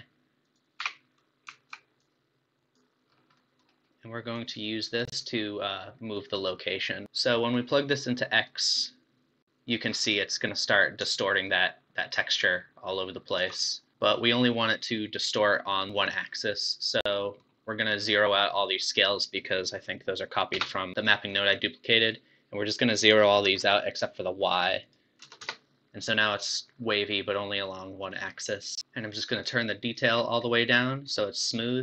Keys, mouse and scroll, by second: 0.4-2.1 drag, 3.2 scroll up 4, 3.4-4.4 middle drag, 4.4 click, 7.6 click, 9.9 scroll down 4, 10.1-11.4 middle drag, 11.4-13.4 shift+drag, 13.7 middle click, 16.5-19.3 middle drag, 19.3 click, 20.5 BackSpace, 23.0-26.4 drag, 26.4-28.7 middle drag, 28.7 scroll up 1, 28.8 middle click, 29.4-30.5 drag, 30.5-31.8 middle drag.